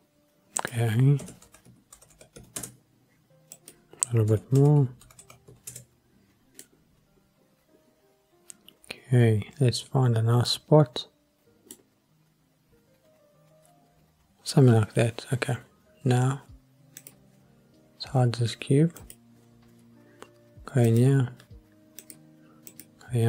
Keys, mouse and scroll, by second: 0.6-2.6 drag, 2.1 KP_0, 3.5-5.7 drag, 5.2 KP_0, 6.6-11.7 middle drag, 11.9-12.3 scroll up 2, 17.0 click, 19.0 click, 20.9 click, 22.0 click, 22.7 click.